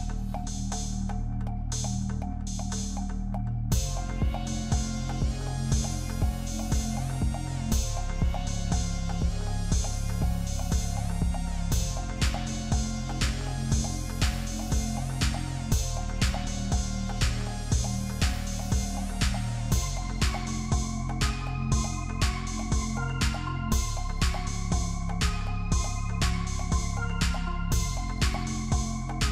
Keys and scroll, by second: 10.8 ctrl+=, 14.3 ctrl+-.